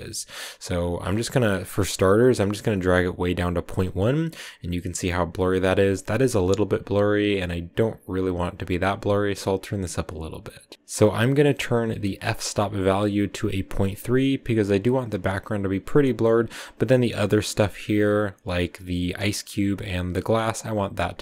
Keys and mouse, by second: 1.0 click.